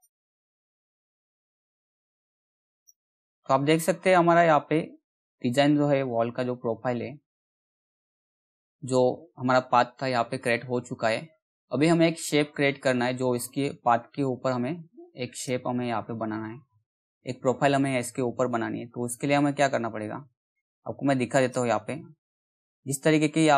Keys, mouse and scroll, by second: 1.1 z, 2.3 click, 14.9 click, 21.0 click, 22.3 ctrl+scroll up 1, 23.4 ctrl+scroll down 1.